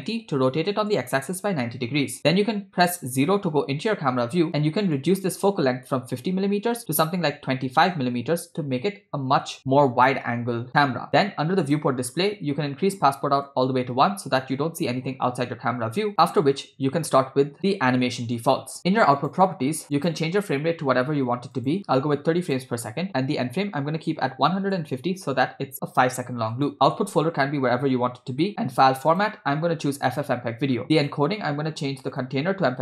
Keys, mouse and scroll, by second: 2.2 KP_0, 5.0-8.1 drag, 11.6 click, 12.2-13.4 scroll down 2, 13.5-14.5 drag, 19.2 click, 20.0-21.8 drag, 22.4-24.7 drag, 26.5-28.5 drag, 27.2 /, 29.1-30.4 drag, 30.8 scroll down 2, 31.0 click, 31.4 scroll down 1, 32.1-32.8 drag.